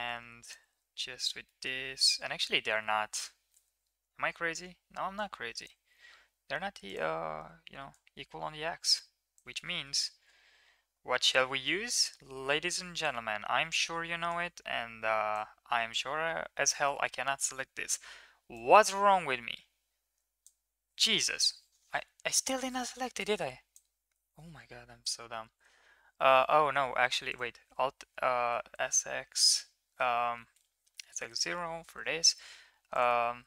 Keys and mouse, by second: 0.4 click, 1.6 middle click, 2.1 1, 3.1 KP_1, 5.2 middle click, 8.1-9.3 drag, 11.2-13.1 drag, 14.3-15.3 drag, 18.8-20.4 drag, 23.1 shift+click, 27.2 alt+click, 28.4 s, 30.9 s.